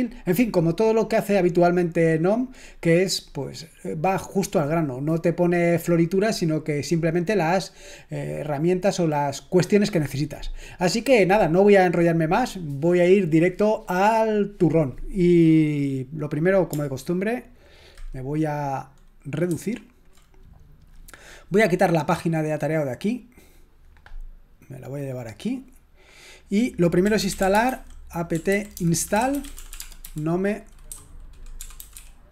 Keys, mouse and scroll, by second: 19.5 ctrl+1, 22.9 click, 23.1-25.4 drag, 26.4 click, 27.0-32.3 typing.